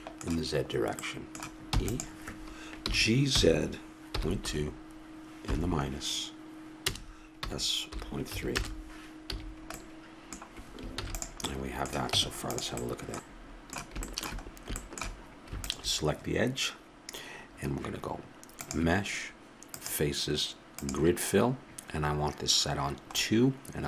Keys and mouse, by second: 0.0 middle click, 0.1 click, 0.2 middle click, 2.0 e, 3.1 g, 7.7 s, 9.7 a, 11.3 ctrl+s, 12.5 Tab, 15.9-17.9 drag, 23.4-23.8 middle drag.